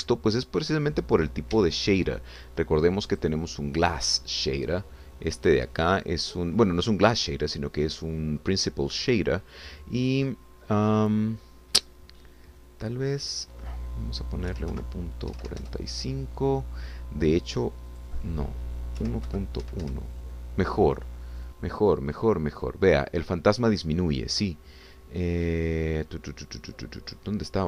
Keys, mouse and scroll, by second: 2.5 Escape, 6.4 click, 9.0-10.0 scroll down 2, 10.0-10.3 scroll down 1, 14.2-15.5 drag, 15.5 1, 15.7 ., 16.3 4, 16.6 Return, 18.9 click, 20.0 1, 20.3 ., 20.6 1, 20.8 Return, 22.9-23.5 scroll up 2, 23.7 scroll down 2.